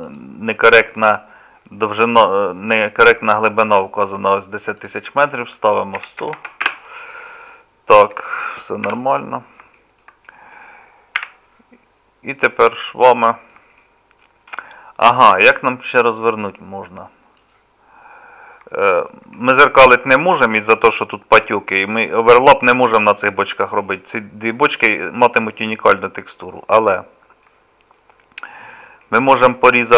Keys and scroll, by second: 6.4 KP_0, 8.9 n, 11.2 2.